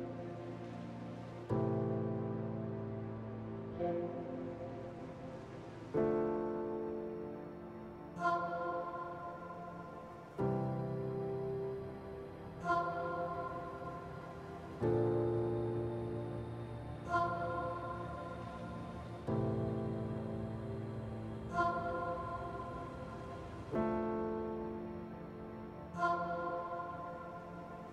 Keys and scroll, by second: 12.1 ctrl+z, 12.8 ctrl+z.